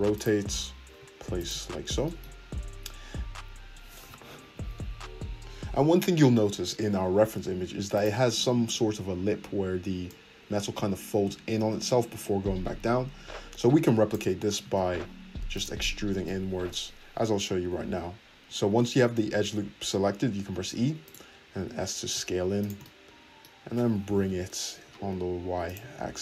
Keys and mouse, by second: 0.4 g, 1.0 shift+click, 1.9 shift+click, 2.4-8.3 middle drag, 8.3-22.7 drag, 14.7 ctrl+z, 20.6 e, 21.5 s, 22.7-24.0 shift+middle drag, 24.0 g, 24.8 shift+middle click.